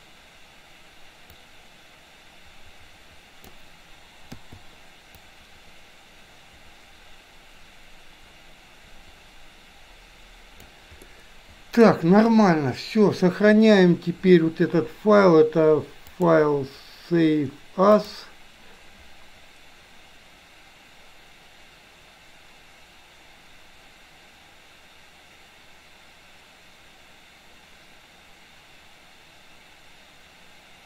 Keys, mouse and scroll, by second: 1.6-3.6 drag, 4.3 i, 5.3-10.8 drag, 11.1-12.0 middle drag, 16.2-18.3 drag.